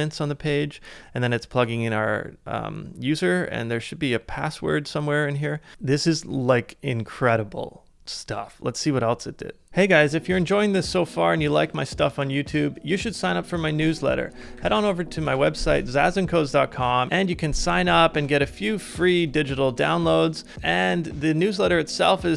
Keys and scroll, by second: 14.3-15.5 typing, 15.5 Return.